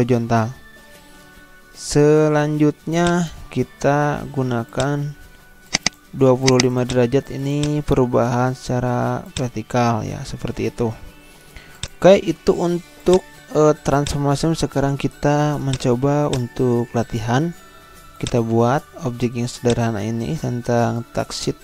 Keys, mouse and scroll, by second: 0.7 ctrl+z, 3.0 click, 4.1 0, 4.7 click, 11.2 ctrl+z, 11.8 click, 18.2 click, 19.0 z, 19.6-21.6 drag.